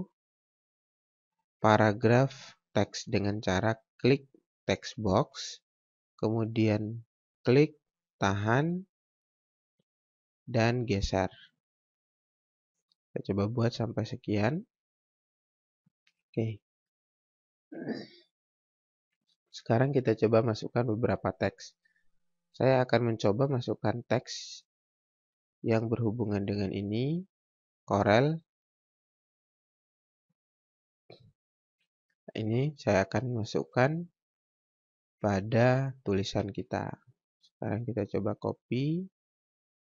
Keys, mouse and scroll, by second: 4.7 click, 7.3 click, 23.2 click, 24.5-27.2 scroll up 1, 27.2 click, 31.6-32.0 scroll down 1, 32.0-32.3 scroll up 1, 34.6-35.0 scroll down 1, 38.0 click.